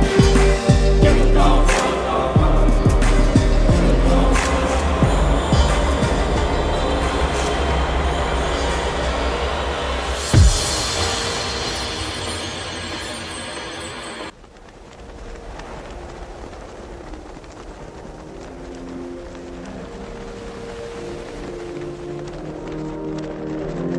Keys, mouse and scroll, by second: 1.1 click, 5.4-8.1 drag, 10.1-11.3 alt+drag, 17.7 alt+scroll up 1, 21.3-23.2 alt+scroll up 2.